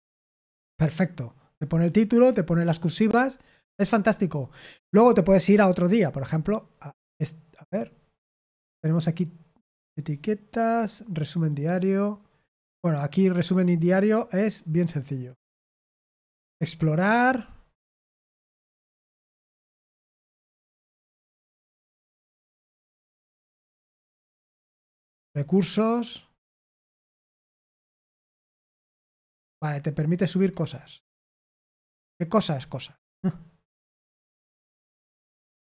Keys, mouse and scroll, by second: 13.1-15.4 scroll down 1, 15.4-16.4 scroll down 1, 16.4-18.4 scroll down 1, 18.4-19.7 scroll down 1, 19.7-22.4 scroll down 1, 22.4-23.5 scroll down 1, 23.5-25.0 scroll down 1, 25.0-28.2 scroll down 1, 28.2-32.5 scroll down 1, 32.5-34.2 scroll down 1, 34.2-35.7 scroll down 1.